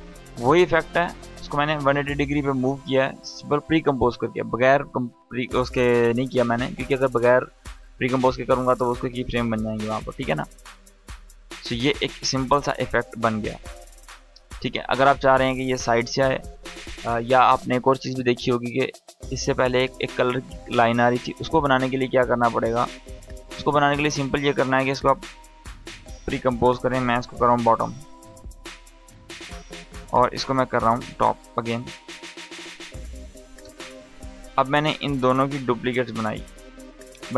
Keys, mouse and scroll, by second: 0.3 Return, 2.4-6.4 drag, 9.8 space, 11.9 click, 16.0 click, 18.2 scroll up 1, 21.6-22.5 drag, 25.9 ctrl+shift+c, 27.0-28.5 typing, 29.9 click, 30.5 shift+click, 31.5 ctrl+shift+c, 33.2 Return, 34.5 click, 35.4 ctrl+d, 35.8 click, 36.2 ctrl+d.